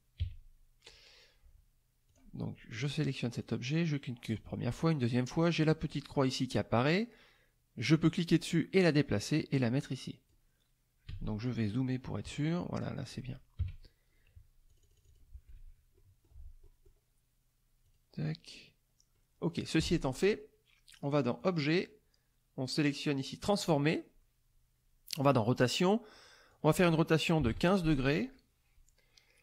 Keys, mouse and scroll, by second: 0.2 KP_3, 2.1 click, 3.4 click, 4.2 click, 6.1 middle click, 8.1-10.5 drag, 11.1 z, 11.4 click, 13.6 KP_5, 14.7 click, 15.5 F1, 16.0 middle click, 16.6 middle click, 17.8 click, 19.1 click, 21.4 click, 23.4 click, 25.2 click, 26.1 click, 26.5 click, 27.4 KP_1, 27.5 KP_5.